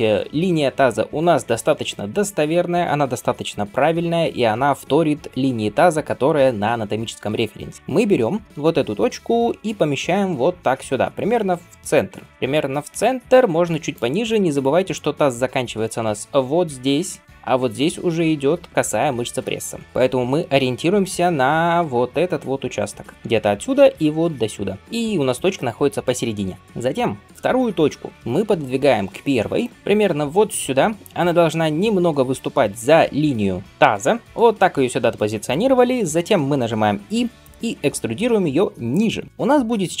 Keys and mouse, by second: 9.5 g, 20.9-24.8 d, 23.1-26.6 drag, 26.3 d, 26.5-40.0 right drag, 28.3 g, 37.0 e.